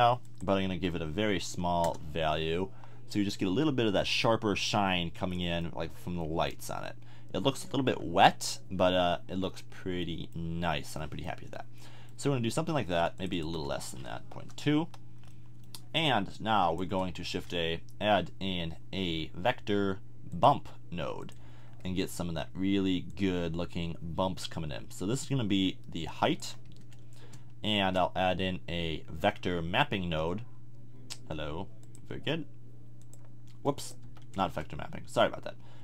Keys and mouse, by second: 0.2-4.2 drag, 13.2-15.1 drag, 16.3 click, 17.2 shift+a, 25.1-27.7 drag, 27.7 shift+a, 33.2-34.0 drag, 34.0 x, 34.4 shift+a.